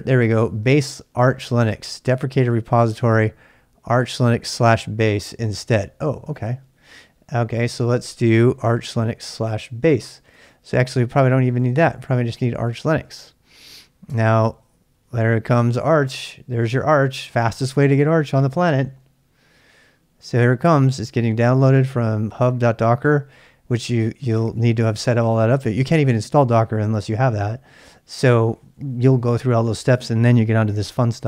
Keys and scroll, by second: 9.8-14.6 typing.